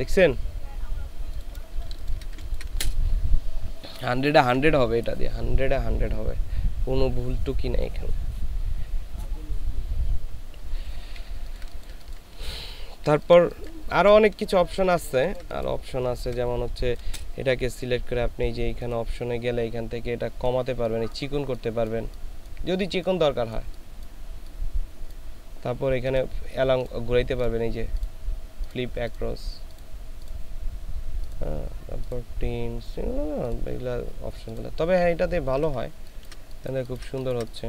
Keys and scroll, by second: 1.7 ctrl+space, 2.3 ctrl+space, 11.5 ctrl+space, 15.2 ctrl+space, 16.1 ctrl+space, 35.9 ctrl+space, 36.7 ctrl+space, 37.2 ctrl+space.